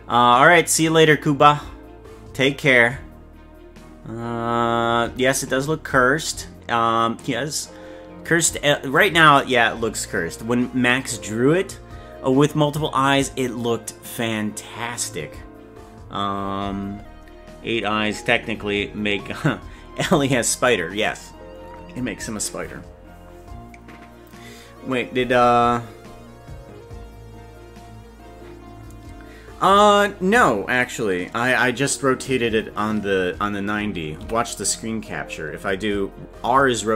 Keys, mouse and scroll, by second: 34.2 r.